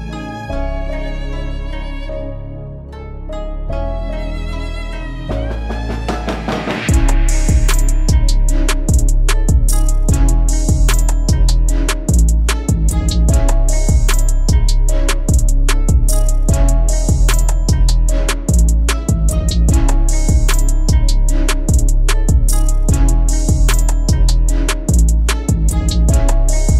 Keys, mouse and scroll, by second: 1.2-1.7 middle drag, 1.7 click, 3.2-3.8 drag, 3.8 middle click, 4.2 s, 6.1 ctrl+r, 7.9 click, 8.6 alt+click, 9.4 alt+click, 10.0 middle click, 10.6 alt+e, 13.9 click, 15.3 e, 17.5 g, 19.1 g, 20.7 middle click, 21.0 e, 23.5 g, 25.8 middle click.